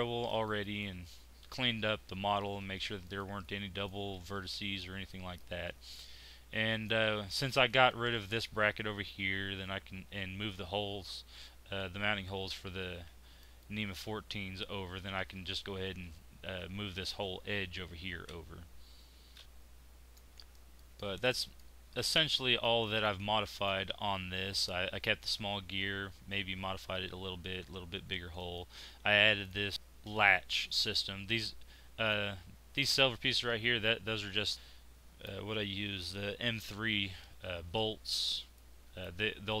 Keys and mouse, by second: 0.0 Tab, 3.1 middle click, 7.3 z, 12.9 z, 19.1 Tab, 22.0-28.2 middle drag, 28.3-29.4 right drag, 29.4 middle click, 32.1 right click, 32.7-34.5 middle drag.